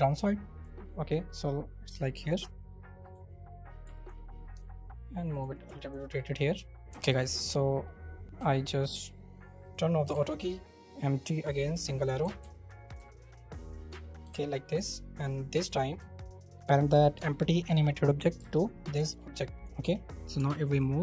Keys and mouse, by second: 0.1 click, 1.2-2.3 drag, 4.5 r, 5.3 click, 5.7 alt+click, 8.2 ctrl+z, 9.6 click, 10.3 shift+a, 11.7 s, 12.4 z, 14.2 g, 17.0 shift+click, 19.8 g, 20.4 Escape.